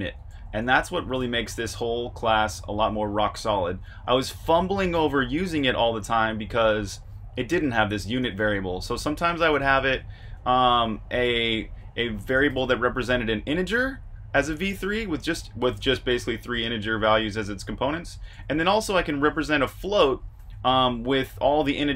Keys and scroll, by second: 0.0-1.1 typing, 5.5-13.6 typing, 18.2 Escape, 18.3 typing, 19.4-21.3 typing.